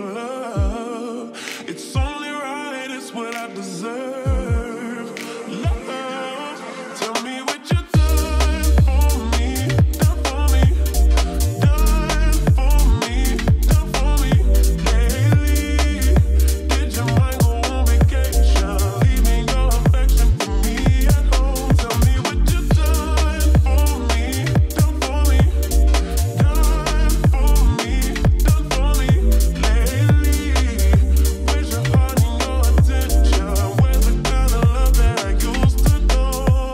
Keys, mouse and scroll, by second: 0.4 space, 4.9 space, 6.1-8.6 drag, 11.7 t, 12.4 click, 13.3-14.1 typing, 15.8 click, 16.1-16.9 typing, 19.3 click, 19.6 click, 23.2 ctrl+s, 24.4-27.5 drag, 29.9 click, 30.4 ctrl+space, 31.2 i, 32.7-35.8 drag.